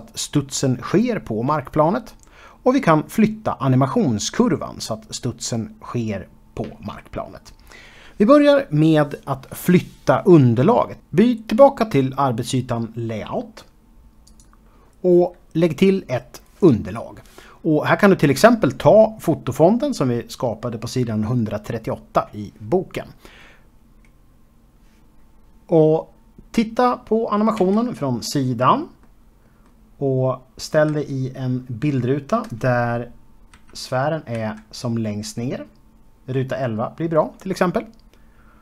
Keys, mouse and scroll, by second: 12.5 click, 16.0 click, 17.4 click, 19.1 click, 19.3 double click, 22.6 s, 23.6 click, 23.8 s, 24.0 x, 24.2 click, 25.1 ctrl+a, 25.2 click, 25.7 a, 26.1 click, 28.3 KP_3, 29.8 middle click, 34.2 Left, 35.3 Right.